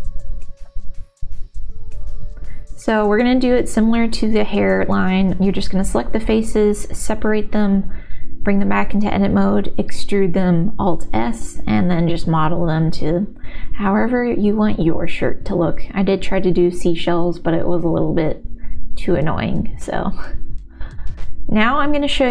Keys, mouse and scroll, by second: 1.6 Tab, 2.4 click, 3.1 3, 3.6-4.7 middle drag, 5.8 shift+d, 6.1 p, 7.2 Tab, 7.8 Tab, 8.1 ctrl+z, 8.1 alt+s, 10.9 middle click, 11.8 middle click, 12.4 ctrl+r, 13.8 s, 15.1 middle click, 15.8 shift+v, 16.7 ctrl+s, 16.7 middle click, 17.3 middle click, 19.0 Tab, 19.0-20.7 middle drag.